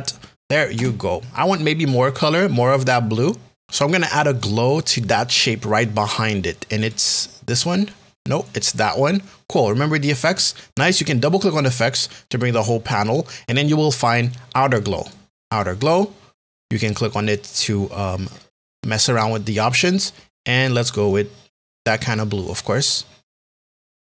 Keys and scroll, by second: 0.7 Return.